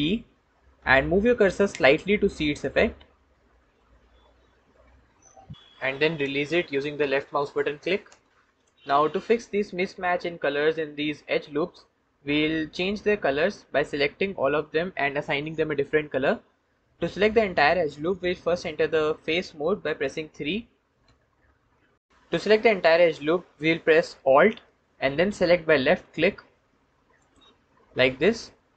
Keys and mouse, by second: 0.4 ctrl+b, 8.4 click, 20.9 3.